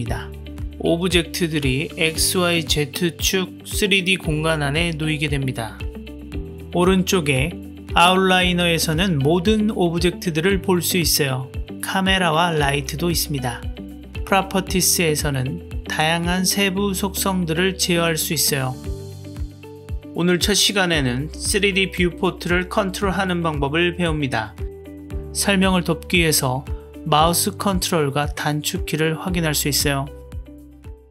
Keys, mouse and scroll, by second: 8.1-9.5 drag, 11.9 click, 12.7 click, 15.4-17.0 drag, 19.1 click, 27.0 click, 27.2 middle click, 27.6-28.5 right drag, 28.6 ctrl+c, 30.4 shift+click.